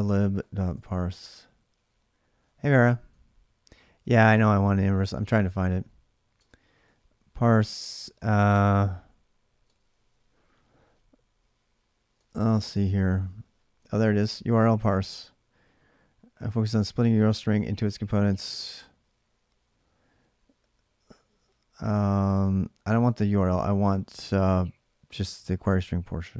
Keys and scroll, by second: 0.4-1.2 typing, 3.8 Return, 3.8 typing, 6.1 space, 6.6 k, 8.5-9.4 typing, 11.6-12.3 typing.